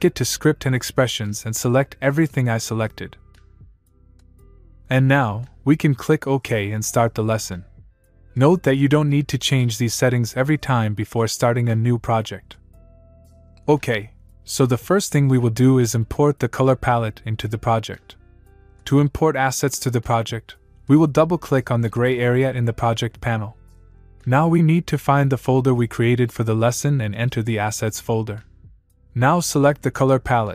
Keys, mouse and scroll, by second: 0.9 click, 6.8 click, 21.2 click.